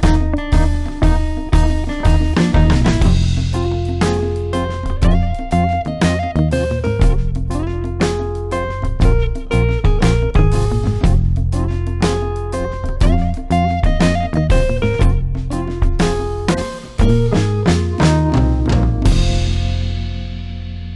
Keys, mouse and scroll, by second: 1.5-2.5 typing, 3.7 click, 6.8 Delete, 8.1 click, 10.9 space, 11.8-12.7 ctrl+click, 12.3 click.